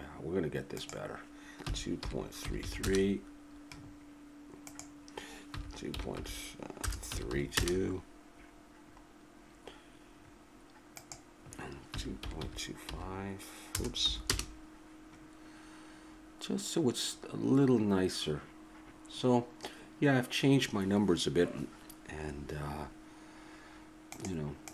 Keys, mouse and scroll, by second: 0.8-2.5 drag, 2.6 3, 4.7-6.4 drag, 10.9-12.9 drag, 16.0-20.6 middle drag.